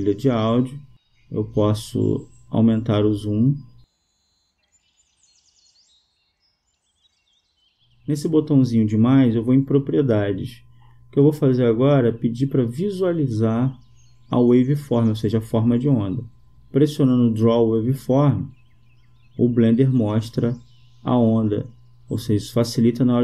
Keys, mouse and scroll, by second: 2.0-4.3 drag, 4.5-6.3 middle drag, 9.6-11.2 drag, 12.0-14.4 middle drag, 14.4-17.7 drag, 17.8 click, 19.4-21.6 drag.